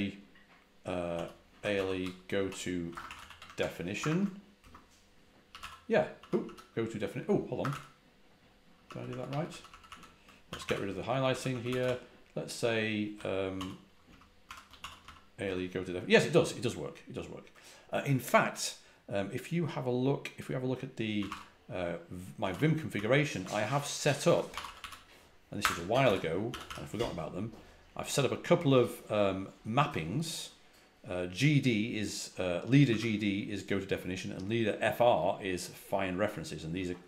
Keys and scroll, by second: 1.2-3.9 typing, 3.9 Tab, 4.5 Return, 5.1-6.3 typing, 7.5 Escape, 7.6 u, 8.7-14.9 typing, 14.0 Return, 15.3 Return, 20.8-26.5 typing, 32.8 typing.